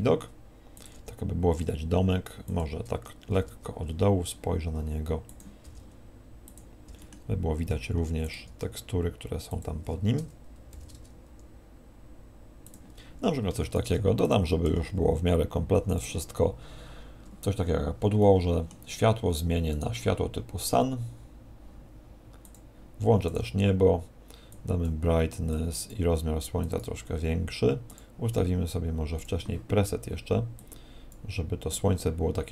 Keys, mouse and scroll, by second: 0.8 click, 0.9 g, 2.6 click, 3.3 shift+f, 5.4 click, 5.6 g, 6.5 click, 6.8 g, 8.2 g, 8.3 click, 8.4 g, 9.6 click, 10.7 shift+f, 12.8 click, 13.6 shift+a, 14.6 s, 15.9 click, 18.0 scroll down 1, 18.2 middle click, 19.0-19.5 scroll down 3, 19.7 right click, 22.4 click, 29.5 click.